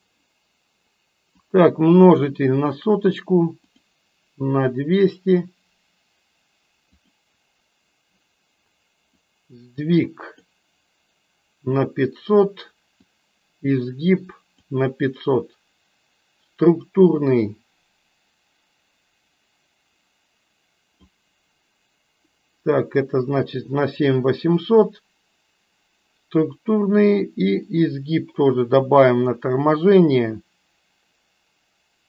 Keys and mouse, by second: 1.3 click, 3.9 click, 7.1 click, 9.2-10.6 drag, 13.1-14.7 drag, 17.1-21.2 drag, 27.7-29.5 drag.